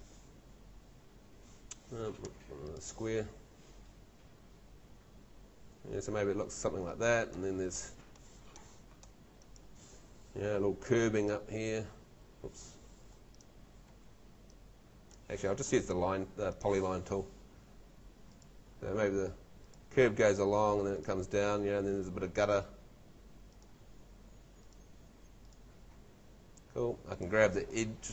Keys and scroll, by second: 7.9 Escape, 12.3 Escape, 13.9 Escape, 15.1 Escape, 26.7 Escape.